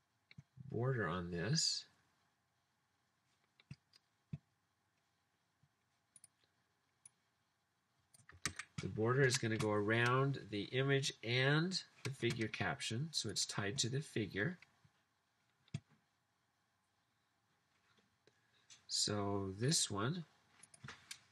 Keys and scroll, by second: 8.5 super+c.